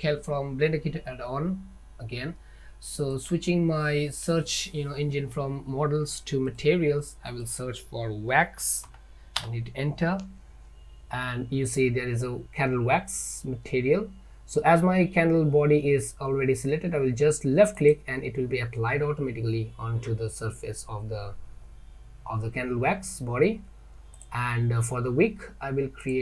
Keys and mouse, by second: 3.2 click, 7.5-11.6 drag, 24.2 click, 26.1 click.